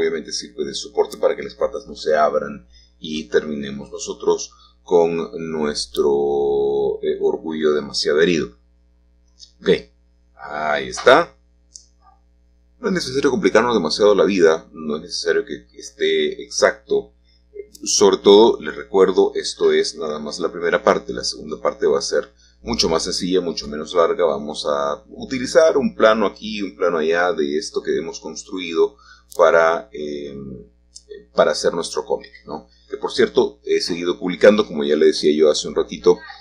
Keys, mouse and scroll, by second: 8.6 3, 9.1 click, 10.2 e, 12.1-17.2 drag, 12.8-17.2 middle drag, 17.2-18.0 scroll down 1, 18.0 scroll down 1, 18.0 middle click, 19.3-22.1 shift+middle drag, 22.9 click, 26.2-27.6 drag, 28.8-30.2 drag, 30.3 click, 35.6-36.4 drag.